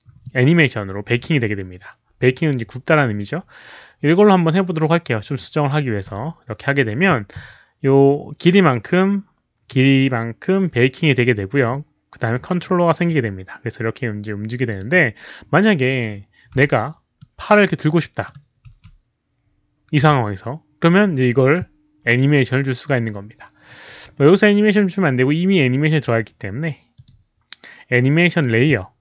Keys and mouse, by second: 6.0 click, 13.0-14.5 drag, 14.6 click, 15.8 click, 16.8 click, 16.8 w, 17.1-18.1 middle drag, 18.2 middle click, 18.4-19.1 typing, 18.6 click, 23.6-24.4 typing, 23.9 middle click, 23.9 click, 26.2-27.1 typing, 26.6 middle click, 26.9 click, 28.3 click.